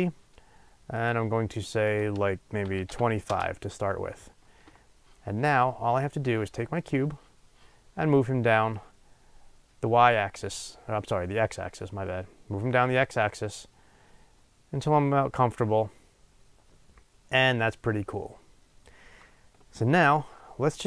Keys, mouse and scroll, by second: 4.0 Return, 9.3-20.2 drag, 20.2-20.8 middle drag.